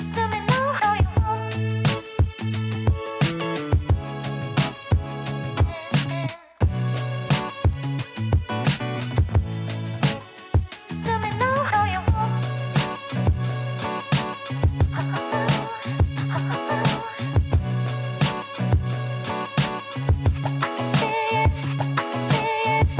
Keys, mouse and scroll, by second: 1.6 ctrl+r, 3.4 s, 5.6 click, 6.5 s, 9.2-10.3 scroll down 9, 10.3-11.1 scroll up 2, 11.1 shift+z, 12.0 Tab, 12.5-13.0 scroll down 1, 13.0-14.0 middle drag, 14.0 click, 15.2 g, 17.1-17.6 scroll up 2, 17.6-18.6 middle drag, 18.6 click, 20.2 click.